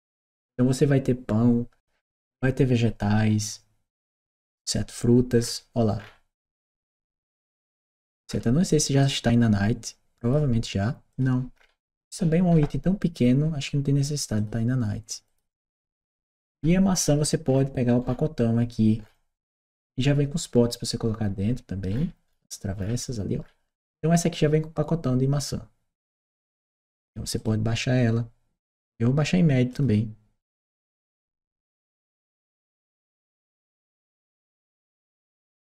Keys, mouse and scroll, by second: 5.2 scroll down 1, 5.8-8.1 scroll down 1, 8.1-8.4 scroll up 1, 8.8 click, 10.0 click, 10.9 click, 11.4 scroll up 2, 12.3-13.0 scroll up 2, 13.0 click, 14.2 click, 15.1 click, 15.6-16.3 scroll down 2, 16.4-17.6 scroll down 4, 17.9-18.6 scroll down 2, 18.8-19.6 scroll down 2, 19.6 scroll up 2, 21.8-22.6 scroll down 4, 22.6-23.0 scroll down 1, 23.3 scroll up 2, 27.2 click, 29.5 click.